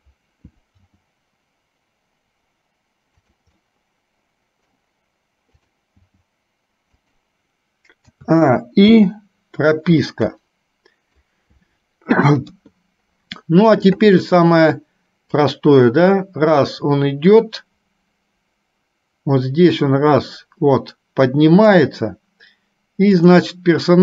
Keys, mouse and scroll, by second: 0.9 g, 3.8-4.9 middle drag, 5.8 click, 6.3 g, 8.3 a, 10.1-11.4 middle drag, 12.6 KP_3, 15.5-21.9 drag, 23.1 click.